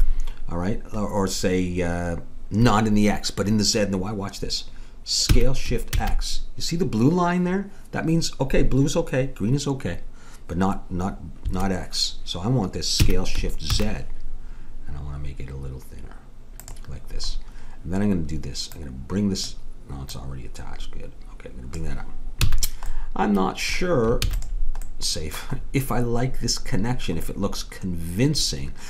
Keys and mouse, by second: 5.3 s, 13.0 s, 17.9 middle click, 18.7-22.0 drag, 22.5 a, 23.0-24.2 middle drag, 24.2 ctrl+s, 28.5 middle click.